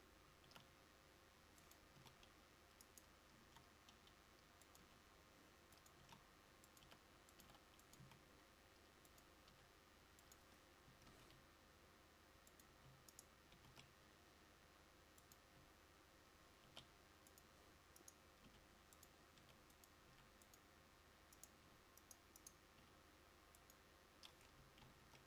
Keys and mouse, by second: 3.5 s, 4.9 g, 6.1 s, 11.3 shift+d, 15.7 e, 16.7 r, 20.3 r, 21.7 g, 24.9 shift+d.